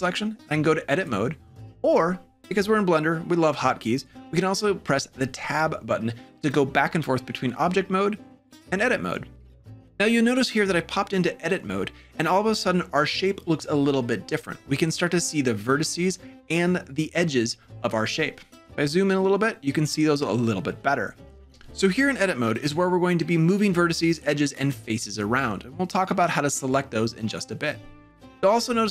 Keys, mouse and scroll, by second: 5.3 Tab, 8.1 Tab.